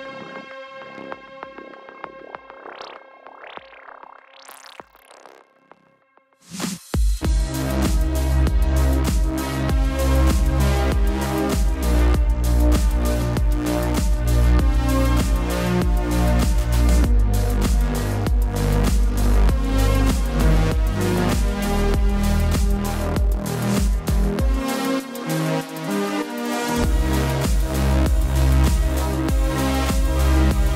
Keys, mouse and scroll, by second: 3.5 click, 5.7 click, 8.1 typing, 9.8 typing, 11.0 click, 15.6 typing, 15.8 click, 17.3-18.3 typing, 20.5 typing, 20.9 click, 24.5 space, 24.6 click, 24.7 space, 27.8 ctrl+-, 28.1 space, 28.2 click, 28.2 space, 29.5 click, 30.5 s.